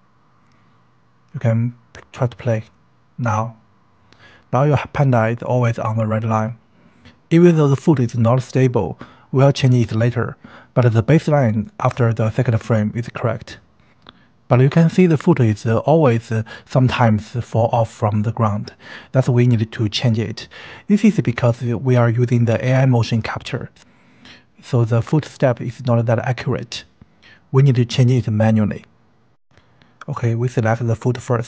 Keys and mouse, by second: 0.8 click, 1.5 space, 22.1 space.